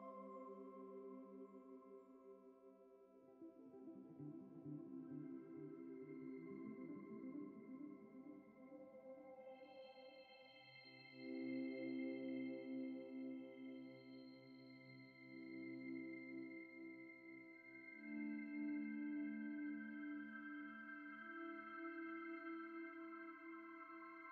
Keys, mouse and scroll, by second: 0.5 shift+click, 2.8 Return, 3.2 ctrl+-, 4.4 ctrl+space, 4.4 ctrl+click, 4.6 ctrl+space, 5.1 ctrl+t, 5.6 shift+click, 8.3 shift+click, 9.3 Return, 9.8 ctrl+j, 10.4 typing, 12.6 v, 14.5 v, 15.9 Return, 17.7 ctrl+t, 18.5 shift+click, 20.7 ctrl+z, 21.8 v, 23.1 ctrl+e, 23.6 shift+click.